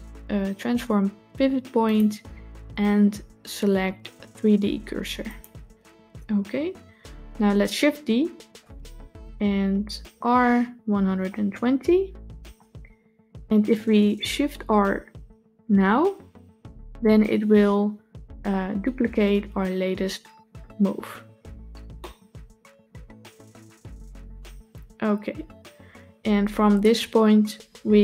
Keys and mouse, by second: 1.9-5.3 drag, 8.3 shift+d, 15.7 shift+r, 21.9-28.0 middle drag.